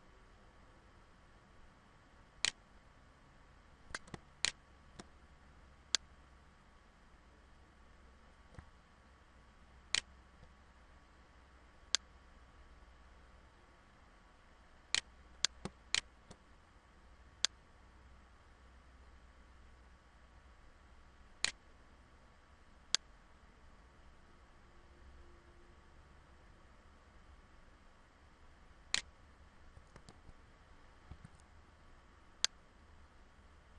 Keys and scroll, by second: 29.6 ctrl+z.